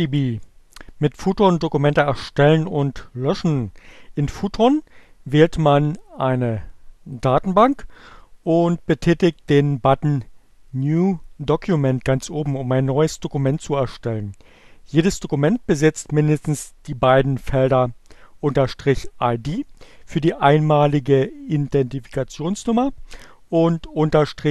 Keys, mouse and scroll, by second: 7.1 click, 10.8 click.